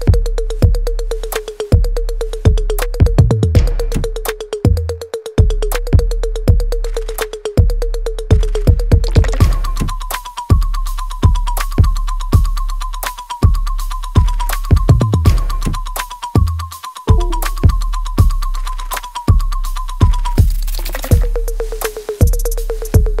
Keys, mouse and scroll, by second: 0.0-2.9 alt+drag, 2.9 click, 5.1 click, 12.8 click, 14.0 alt+right click, 14.5-16.1 alt+drag, 16.1 right click, 16.7 click, 17.1 alt+right click, 17.5-22.9 alt+drag, 22.9 ctrl+z.